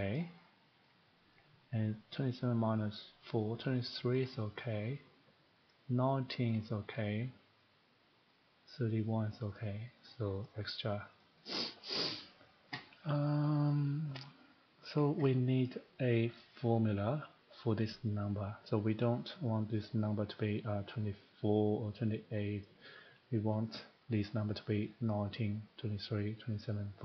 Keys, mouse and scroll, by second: 0.1 click, 0.8 click, 1.3 click, 3.4 click, 4.1 click, 5.7 click, 6.5 click, 8.3 click, 9.2 click, 10.0 click, 10.2 click, 10.5 click, 11.3 click, 11.5 click, 11.7 click, 14.5 click, 20.1 click, 25.1 click.